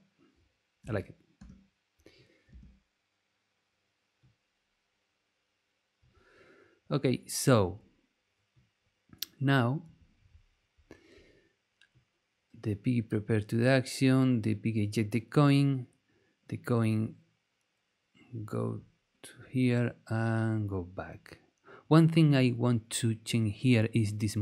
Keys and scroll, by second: 0.8 space.